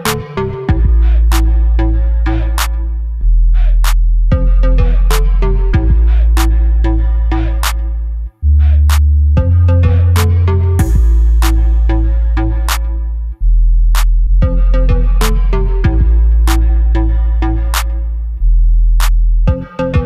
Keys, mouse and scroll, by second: 1.6 scroll down 1, 2.5 shift+a, 3.5 KP_7, 4.0 shift+z, 4.7 g, 5.6 click, 5.8 s, 7.5 click, 7.7-9.9 middle drag, 8.4 g, 9.9 click, 10.3 KP_7, 10.8 g, 13.2 click, 13.3-16.9 middle drag, 13.8 scroll up 1, 14.4 s, 15.1 Escape, 15.5 s, 16.9 click, 17.1 middle click, 17.5 shift+z, 17.8-18.3 scroll down 1.